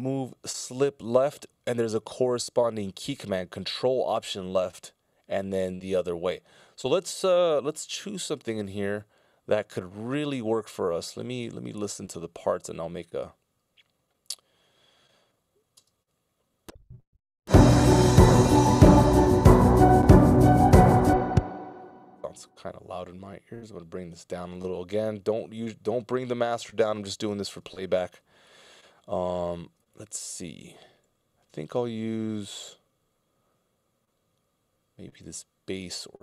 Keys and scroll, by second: 17.6 space, 19.7 space, 32.4 i.